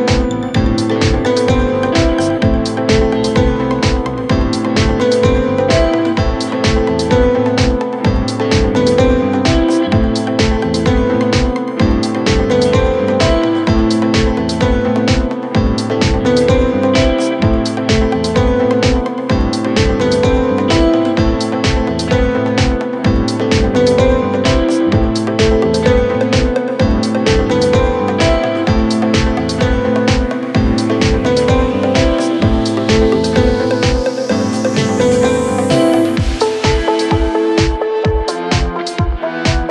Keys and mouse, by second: 0.3-5.8 drag, 5.2 s, 5.8 middle click, 6.1-7.5 drag, 7.1 s, 7.5 middle click, 7.8 click, 8.8 middle click, 9.5-12.7 drag, 12.4 s, 12.7 middle click, 13.1-14.6 drag, 14.3 s, 14.6 middle click, 14.9-17.4 drag, 16.0 s, 17.1 s, 17.4 middle click, 17.8-24.5 drag, 22.8 z, 23.7 z, 24.5-37.4 shift+middle drag, 25.9 x, 30.6 shift+a, 33.3 s, 35.2 s, 36.3 s, 37.4-39.7 drag.